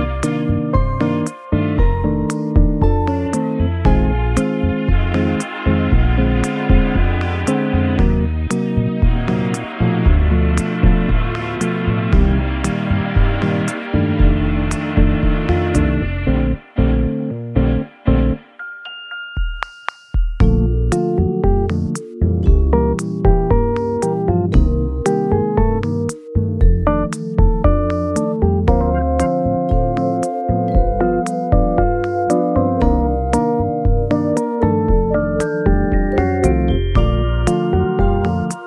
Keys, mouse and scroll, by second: 0.1 shift+s, 2.6 Tab, 8.9 scroll down 2, 13.5-13.9 scroll up 4, 14.2 scroll up 2, 14.6-15.3 scroll down 7, 15.9 middle click, 16.7 shift+d, 17.3 right click, 22.6 right click, 26.0 scroll down 3, 26.3 scroll up 1, 26.4 middle click, 28.9-29.8 scroll up 1, 29.8 w, 29.9 r, 32.6 x, 33.8 Escape, 34.3 double click, 34.4 scroll down 1, 34.7 middle click, 36.0-37.2 scroll down 1, 37.3 middle click.